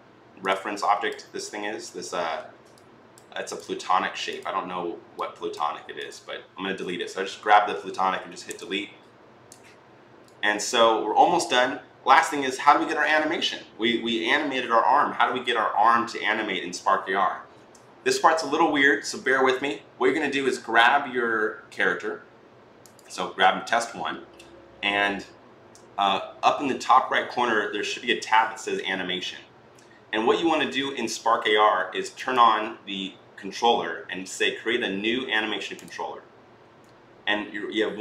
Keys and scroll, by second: 8.4 Delete.